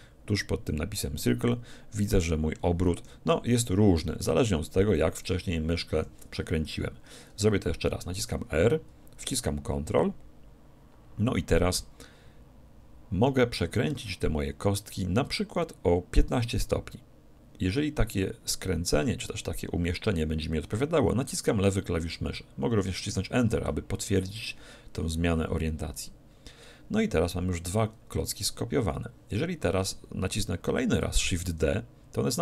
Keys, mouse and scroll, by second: 8.2 r, 22.1-24.1 drag, 31.4 shift+d.